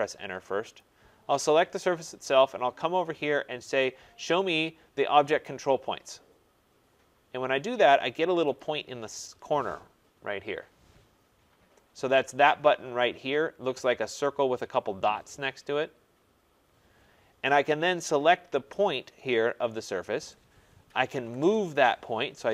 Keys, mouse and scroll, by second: 0.7 click, 5.4 click, 8.5 click, 20.6-21.7 typing.